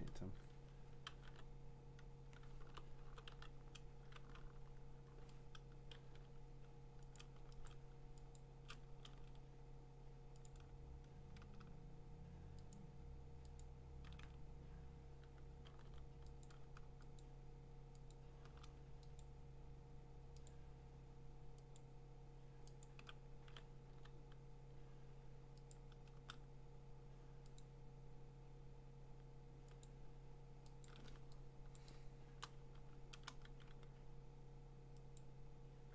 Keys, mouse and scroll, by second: 1.0-3.3 typing, 4.3 b, 6.1 x, 7.2 click, 7.7 shift+click, 8.4 click, 9.1 ctrl+z, 10.5 click, 12.7 shift+click, 13.6 click, 15.9 x, 16.5 click, 17.2 shift+click, 18.9 click, 19.2 click, 20.5 shift+click, 21.8 shift+click, 22.8 shift+click, 23.9 x, 25.7 click, 27.1 click, 27.6 shift+click, 29.9 click, 30.9-32.5 shift+click, 31.7-32.3 scroll, 31.8 click, 32.4 shift+click, 32.8 click, 35.7 x.